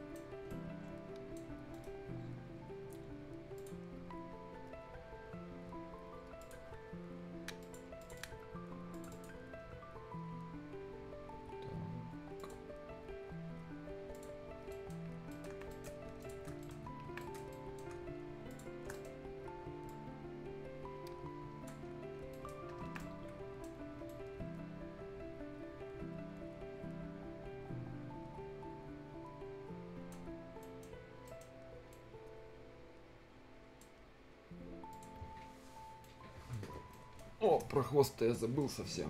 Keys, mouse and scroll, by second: 0.3 scroll up 1, 0.5 right click, 1.7 middle click, 2.0-3.6 scroll up 1, 3.6 click, 3.8 scroll down 1, 4.4 scroll up 1, 6.4 click, 9.8 scroll down 1, 12.4 click, 12.7-13.0 scroll down 1, 13.0 scroll up 1, 14.2 click, 14.6-15.0 scroll down 2, 14.7 right click, 15.1 scroll up 1, 15.3 right click, 15.4 Escape, 15.6 scroll down 1, 15.7 right click, 16.0 scroll up 1, 16.2 shift+click, 16.5 scroll down 1, 16.6 right click, 16.9 scroll up 1, 17.1 Escape, 17.2 right click, 17.2 right click, 17.9 scroll up 1, 18.5 ctrl+shift+click, 18.8 ctrl+shift+scroll down 1, 18.9 ctrl+shift+right click, 19.2-19.6 shift+scroll up 1, 19.9-22.3 shift+drag, 22.3 shift+right click, 22.5 shift+scroll down 1, 22.8 shift+Escape, 23.0 shift+right click, 23.8 shift+scroll up 1, 24.1-30.3 shift+right drag, 30.3 shift+scroll up 1, 30.6 shift+right click, 30.9 shift+scroll down 1, 31.3 shift+right click, 31.6-31.9 shift+scroll up 1, 31.9-33.9 shift+right drag, 33.9 shift+scroll down 1, 34.9 shift+click, 35.4 shift+scroll down 1, 35.8 shift+scroll up 1, 36.0 shift+right click, 36.9 shift+right click, 38.0 shift+scroll up 1, 38.4 shift+right click, 38.7 shift+scroll down 1, 38.9 shift+scroll up 1.